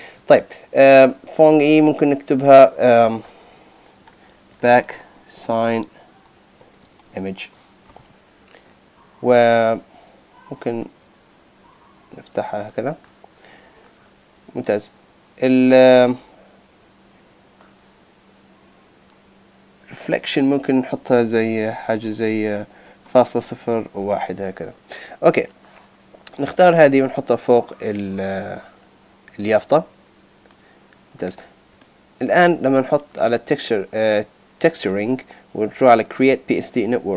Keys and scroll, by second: 4.0 shift+b, 4.8 shift+s, 6.6 shift+i.